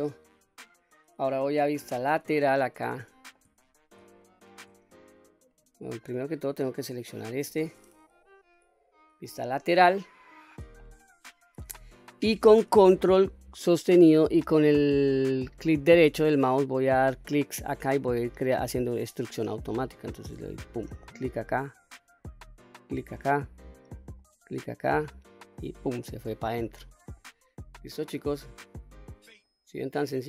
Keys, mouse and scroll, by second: 1.8 KP_3, 3.0-3.3 shift+middle drag, 3.6-4.0 scroll up 2, 4.2 shift+middle click, 4.9 click, 5.5 middle click, 6.8 click, 9.2 KP_3, 9.9-10.4 scroll up 1, 10.4 scroll up 1, 10.8 shift+middle click, 20.9-26.0 ctrl+right drag, 26.7-27.3 scroll down 2, 27.2 middle click, 27.8 scroll down 1, 28.4-28.9 middle drag, 29.5 middle click.